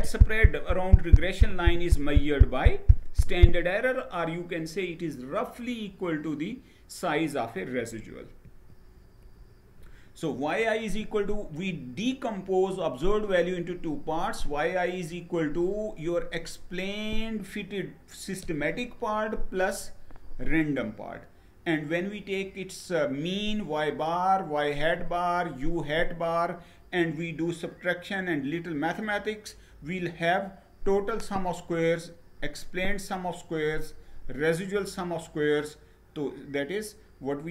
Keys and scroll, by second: 8.0 Page_Down.